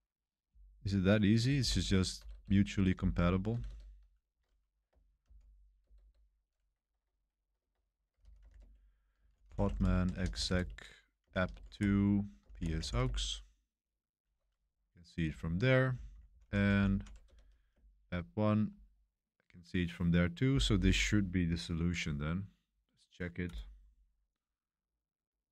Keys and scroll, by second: 1.5 ctrl+l, 1.8 p, 2.2 BackSpace, 2.3 BackSpace, 2.9 ctrl+l, 3.5 BackSpace, 3.6 BackSpace, 5.2 ctrl+l, 5.8 BackSpace, 6.0 BackSpace, 7.9-13.3 typing, 15.2 Up, 15.9 Left, 16.1 Left, 16.2 Left, 16.4 Left, 16.6 Left, 16.7 Left, 16.9 Left, 17.2 BackSpace, 17.3 1, 17.7 Return.